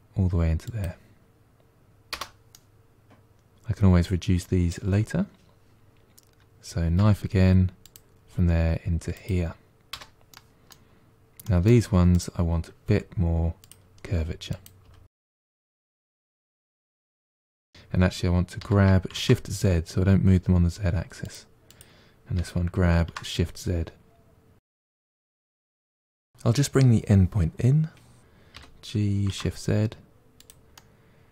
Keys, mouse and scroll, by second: 2.4-5.4 middle drag, 6.8 k, 10.2 middle click, 10.9-11.3 scroll up 1, 11.3 middle click, 12.0 click, 12.7 g, 14.4 click, 14.7 g, 16.2 click, 16.5 g, 17.4 ctrl+z, 17.4 ctrl+z, 19.0 g, 21.5 click, 22.2 g, 24.8 scroll down 2, 24.9 middle click, 26.1 middle click, 26.4 click, 26.8-28.4 middle drag, 28.4 g, 30.6-31.3 middle drag.